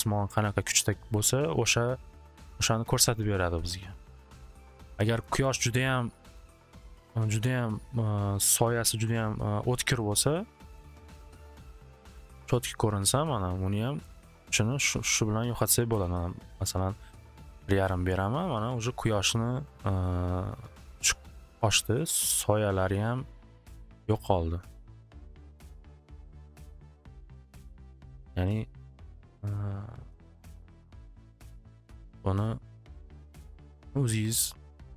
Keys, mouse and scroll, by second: 4.2-8.1 drag, 8.5 middle click, 9.1 middle click, 10.3 middle click, 10.8 middle click, 11.9 middle click, 12.6 middle click, 14.5 middle click, 15.6 click, 15.7 5, 15.9 Return, 17.3 click, 22.0 middle click, 23.8 middle click, 27.7-28.9 middle drag, 30.7 click, 31.4 2, 31.7 Return.